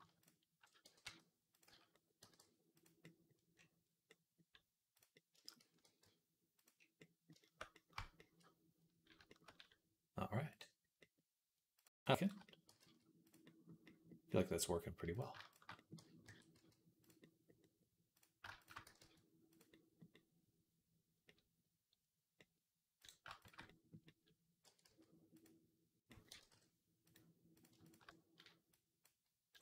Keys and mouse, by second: 0.7 g, 1.5 z, 1.7-2.9 drag, 2.0 g, 3.0 click, 3.7 click, 5.1 shift+click, 5.4-7.8 drag, 5.7 g, 7.8 shift+middle click, 8.2-10.4 middle drag, 10.9 click, 11.7 middle click, 12.3 click, 12.5 g, 13.3-16.8 middle drag, 16.1 g, 18.0 click, 18.3 shift+middle click, 18.4 alt+shift+click, 18.5-19.9 alt+shift+middle drag, 18.7 g, 19.9 click, 20.0 click, 20.8 click, 21.2 click, 21.3 click, 24.0-26.0 drag, 24.5 e, 26.1 g.